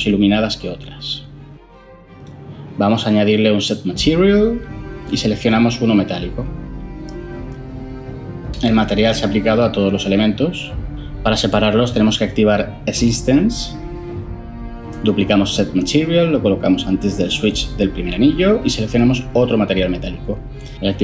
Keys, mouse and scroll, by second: 4.1 ctrl+shift+a, 4.1-4.6 typing, 6.9 typing, 16.1 shift+d, 18.2 typing, 18.6 Down, 18.8 Return.